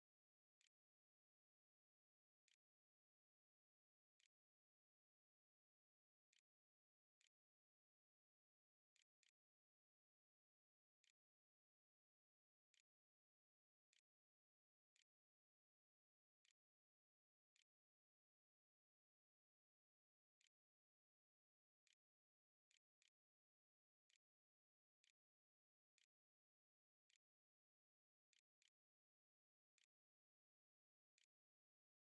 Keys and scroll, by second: 0.0-0.7 typing, 2.0 Tab, 2.7-4.1 typing, 5.0 Delete, 5.8 ;, 6.6 ', 6.7 Return, 8.2-32.0 typing.